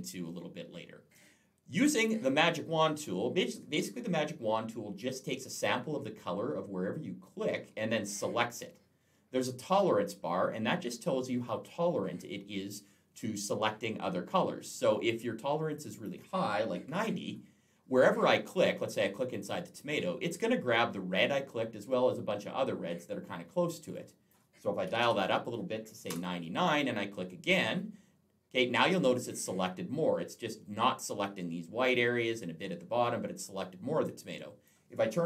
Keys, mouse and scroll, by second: 1.8 click, 15.5 click, 16.6 typing, 19.2 click, 23.8 click, 24.7 typing, 26.0 Return, 27.3 click, 34.1 click.